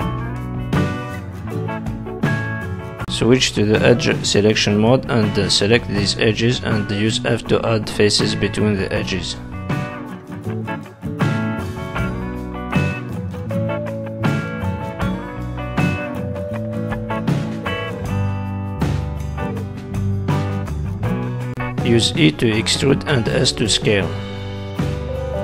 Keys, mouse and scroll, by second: 1.4 click, 2.1 click, 2.7 shift+click, 3.1 shift+click, 3.9 f, 4.3 click, 5.1 shift+click, 5.5 middle click, 7.1 f, 7.8 click, 8.4 shift+click, 9.0 f, 9.3 click, 10.0 shift+click, 10.5 f, 11.1 middle click, 12.8 alt+click, 13.2 middle click, 14.4 z, 15.2 middle click, 15.8 z, 16.8 middle click, 19.0 middle click, 21.2 middle click, 22.0 e, 22.6 s, 23.4 middle click, 24.4 click, 24.8 middle click.